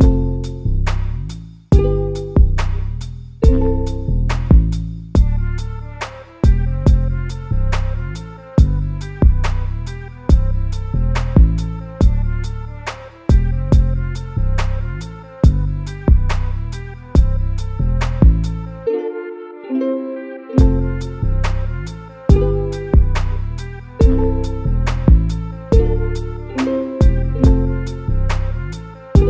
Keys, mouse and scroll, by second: 1.6 l, 4.6 r, 5.3 g, 6.0 a, 6.3 a, 8.0 l, 8.8 g, 9.8-10.2 scroll down 2, 10.2-13.9 middle drag, 13.9 KP_Divide, 14.9 KP_7, 16.8 shift+d, 17.3 g, 20.1 a, 20.3 a, 21.2 KP_Divide, 22.2 Tab, 22.6 KP_7, 23.3 z, 23.7-24.1 scroll down 1, 24.1 g, 26.0 Tab, 26.6 z, 27.0-28.1 middle drag, 28.1 Tab, 28.8 s.